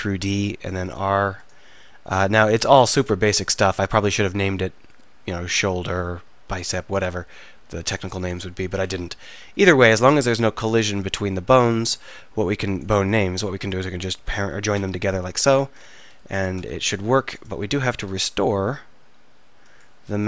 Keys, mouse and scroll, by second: 10.7-14.8 drag, 14.8 ctrl+j, 14.8-15.9 right drag, 16.6 Tab, 17.3 click.